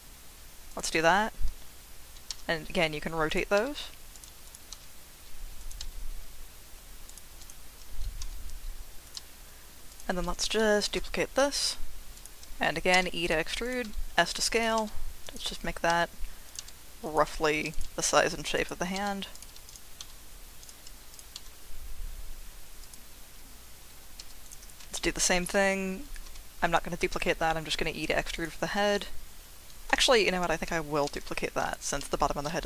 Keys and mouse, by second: 0.7 click, 3.3 click, 3.3 r, 3.6 s, 4.1 click, 4.7 r, 5.6 click, 5.8 s, 7.1 click, 8.2 r, 9.0 click, 9.1 g, 9.9 click, 10.8 shift+d, 12.1 click, 12.9 e, 13.6 click, 13.8 s, 14.5 click, 14.8 g, 15.2 click, 15.9-18.9 typing, 16.4 click, 17.0 click, 18.5 click, 19.3 click, 20.6 click, 21.1 click, 21.3 g, 22.8 click, 24.2 2, 24.4 click, 24.9 shift+click, 25.1 shift+middle click, 25.2 shift+click, 26.2 e, 28.3 click, 30.0 ctrl+z, 32.0 2.